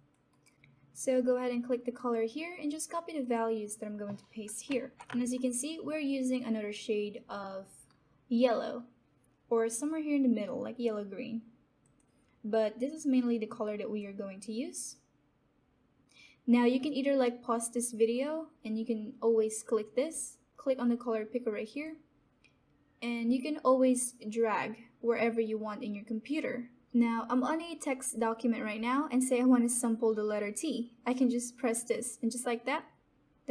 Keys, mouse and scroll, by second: 0.3 alt+right click, 0.5 ctrl+c, 1.9 click, 4.6 ctrl+v, 11.8-16.5 drag, 19.7 click, 21.7 click, 31.5 click, 31.5 click.